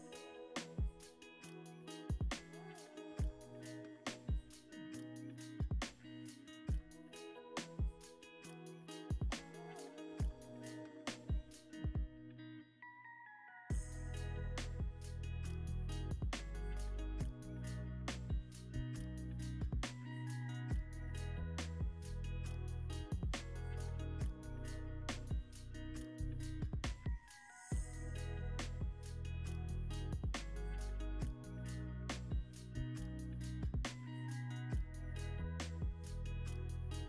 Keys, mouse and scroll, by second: 4.2-6.2 scroll down 2, 6.2 double click, 7.7 scroll down 1, 8.3-8.7 scroll up 1, 8.7 scroll down 1, 9.0 scroll up 1, 9.6 ctrl+click, 10.8-11.1 scroll down 1, 11.2 ctrl+alt+space, 11.3 ctrl+alt+click, 11.4 ctrl+alt+space, 11.5 ctrl+alt+click, 11.5 ctrl+alt+space, 17.6 alt+shift+click, 25.6-28.7 scroll down 1, 28.8 ctrl+click, 34.8 alt+shift+click.